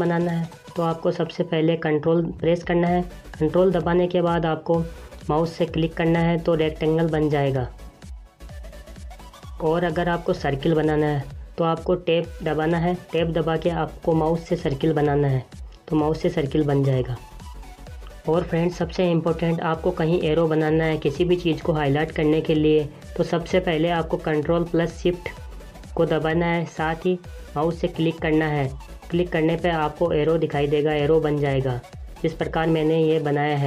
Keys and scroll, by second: 9.8 Tab.